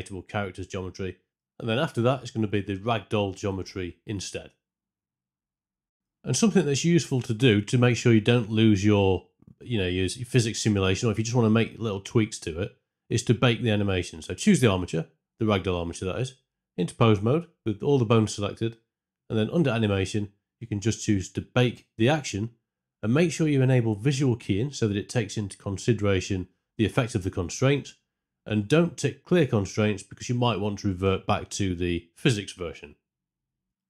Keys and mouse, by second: 6.0 space, 6.9 space, 12.7 Tab, 13.9 a, 15.6-33.8 drag.